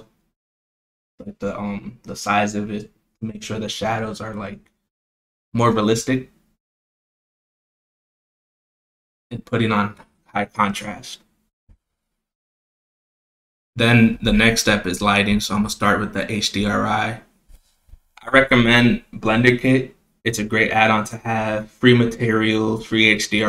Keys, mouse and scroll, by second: 1.1 click, 7.8 click, 8.1-8.5 scroll down 1, 8.8 click, 9.1 click, 10.2 click, 11.3 click, 11.9 click, 12.9-15.0 drag, 16.1 click, 20.3 z, 21.6 KP_0, 23.1 click.